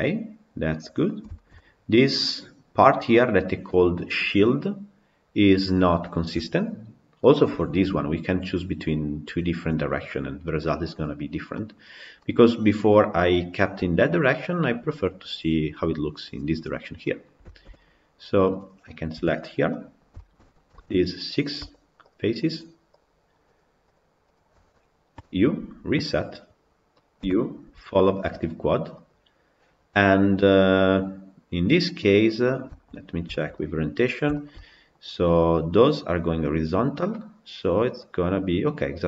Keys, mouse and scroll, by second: 0.9 scroll up 1, 1.2-6.5 shift+middle drag, 6.5-7.0 scroll down 2, 7.0-7.5 middle drag, 7.5 scroll up 2, 9.8 scroll down 5, 10.3 middle click, 10.5-11.4 scroll up 4, 11.4-16.3 middle drag, 16.3-16.9 scroll down 7, 16.9-17.9 middle drag, 17.9-18.4 scroll up 2, 18.4 click, 19.0 KP_Decimal, 19.5-20.7 middle drag, 20.7 Tab, 21.1 click, 21.8 shift+click, 23.4 shift+click, 23.8 shift+click, 24.2 shift+click, 26.2 u, 29.1 u, 31.9 middle click, 32.2-32.5 scroll down 6, 32.5-33.9 shift+middle drag, 33.9 scroll up 2, 34.2-39.0 shift+middle drag.